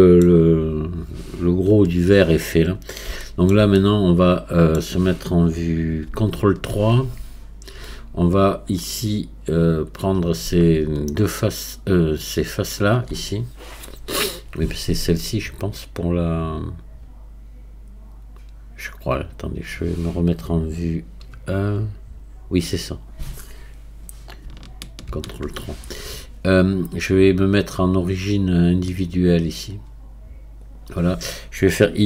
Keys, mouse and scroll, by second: 2.6 scroll up 2, 3.2-6.3 shift+middle drag, 6.3 ctrl+KP_3, 7.0 Tab, 11.3-15.6 shift+drag, 25.0 ctrl+KP_3, 29.6-32.0 drag.